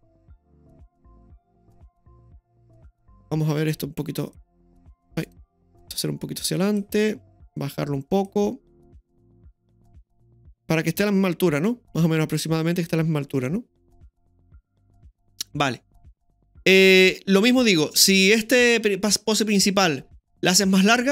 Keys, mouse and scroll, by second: 2.9 right click, 3.7-5.2 drag, 5.2 right click, 5.9 click, 7.5 click, 9.5-10.6 drag, 12.9-17.9 drag.